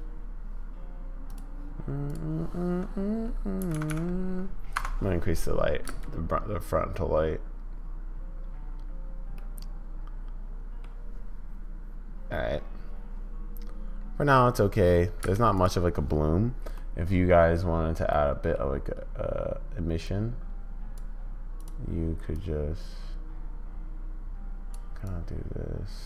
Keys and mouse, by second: 2.1 click, 3.9 0, 5.9 space, 9.4-10.9 middle drag, 15.2 space, 15.5 click, 16.7 middle click, 18.2 middle click, 20.1 click.